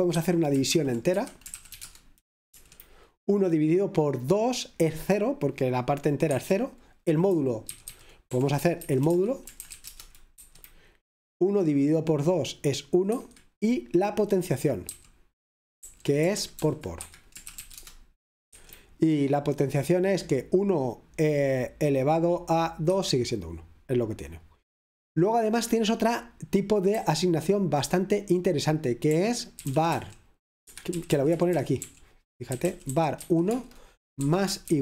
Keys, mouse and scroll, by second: 0.9-2.1 typing, 2.5 F5, 6.3 Escape, 8.3-10.2 typing, 9.1 Escape, 10.4 F5, 13.2 Escape, 15.0 typing, 16.4-18.0 typing, 18.5 F5, 22.9 Escape, 27.0-34.8 typing.